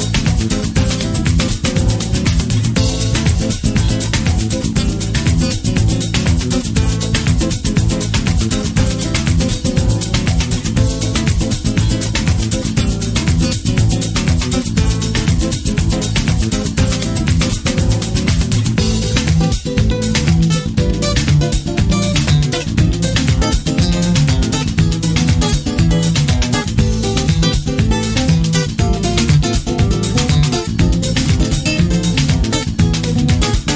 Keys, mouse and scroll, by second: 10.5-11.5 middle drag, 11.5-13.3 scroll up 2, 13.3-20.9 drag, 20.9 middle click, 24.3 middle click, 24.4 scroll up 2, 25.2-29.6 drag, 28.2 KP_Enter, 28.2-33.6 middle drag.